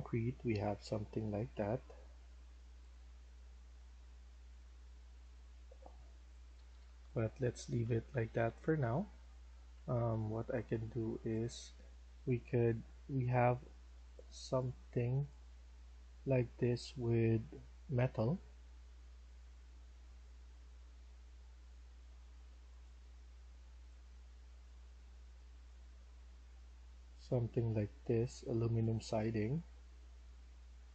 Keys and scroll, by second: 6.5 Escape, 6.7 Escape, 7.2-11.4 typing, 15.9 typing.